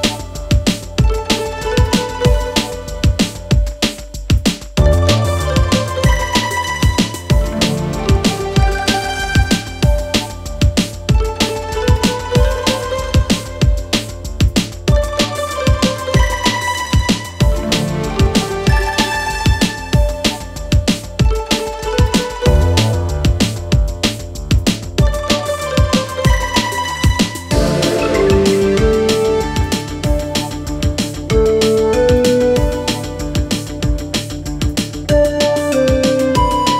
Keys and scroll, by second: 5.1 ctrl+z, 8.0 2, 16.6 Escape, 17.5 ., 22.5 4, 34.2 3.